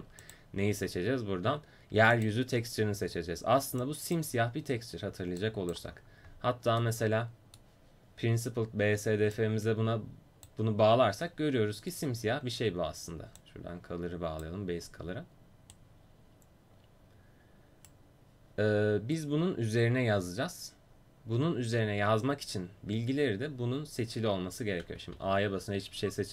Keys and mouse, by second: 0.2-7.5 drag, 9.4-12.9 drag, 13.5-15.8 drag, 15.8-17.9 right drag, 25.2 a.